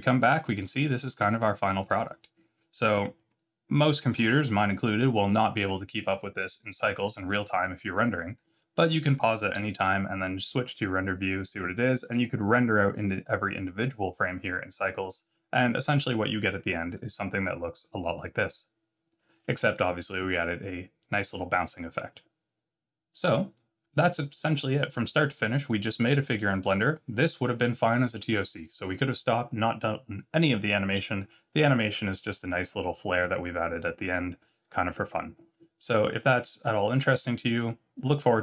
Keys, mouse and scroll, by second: 1.7 click, 4.2 alt+a, 8.2 click, 9.5 z.